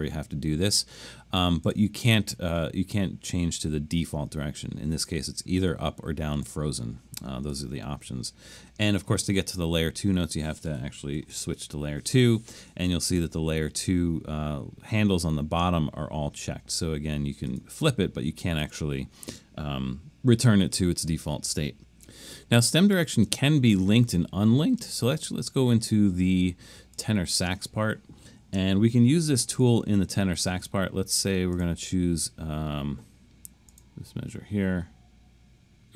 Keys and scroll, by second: 11.2 alt+super+2, 28.8 super+=, 29.0 super+=, 29.4 super+=.